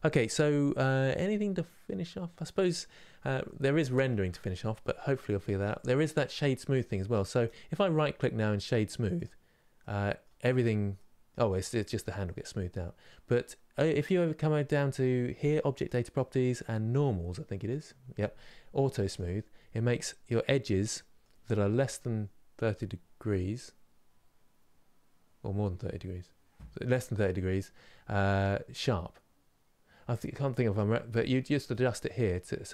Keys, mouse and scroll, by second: 8.9 right click, 9.4 middle click, 10.1-10.6 scroll up 2, 10.6-18.8 middle drag, 18.8-20.2 drag, 20.2-27.6 middle drag, 27.6-29.5 scroll up 1, 30.5-32.7 drag.